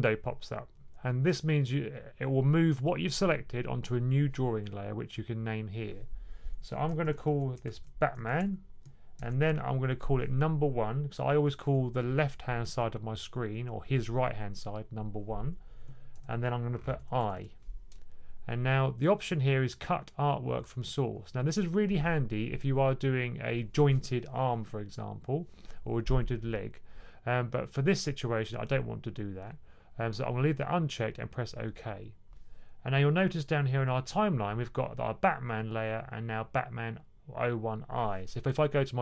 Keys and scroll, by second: 6.7-9.1 typing, 11.1-11.8 typing, 15.8-17.7 typing.